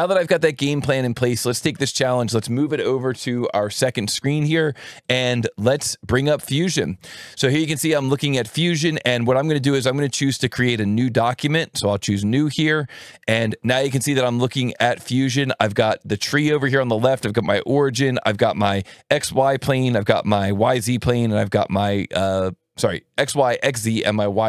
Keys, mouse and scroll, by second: 0.0 click, 1.1-3.6 drag, 5.0-6.9 drag, 12.0 click, 16.1 click.